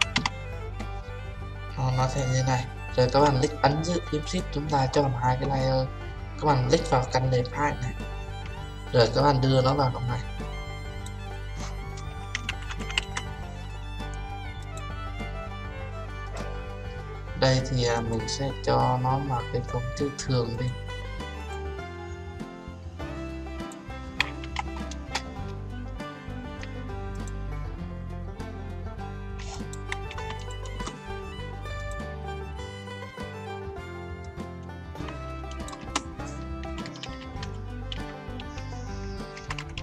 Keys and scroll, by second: 24.9 Return.